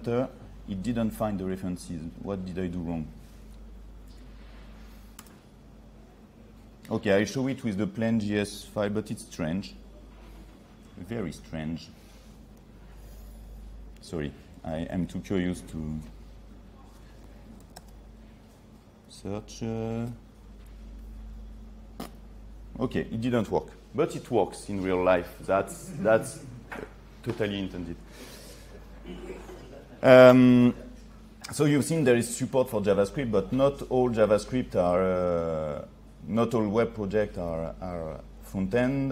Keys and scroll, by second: 3.6 ctrl+3, 13.1 ctrl+3.